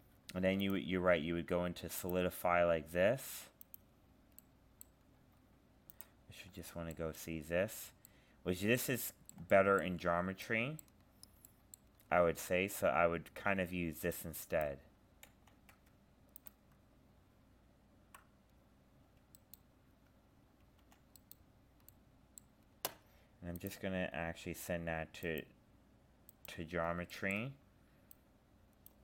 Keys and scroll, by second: 15.3 ctrl+z.